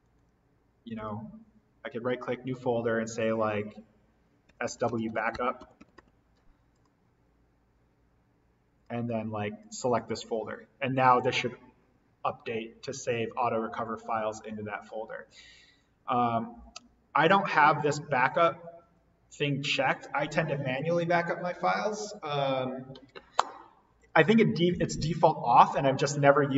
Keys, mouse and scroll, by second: 0.0 right click, 1.0 click, 4.2-6.4 typing, 6.7 click.